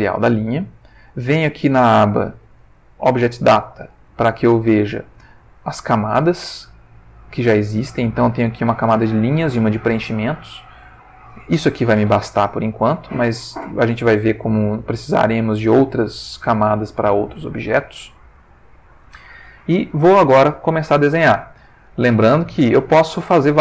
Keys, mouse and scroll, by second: 1.4 click, 14.7 ctrl+middle click, 16.1 ctrl+middle click, 17.7 shift+middle click, 18.5 ctrl+shift+middle click, 22.3-23.6 drag.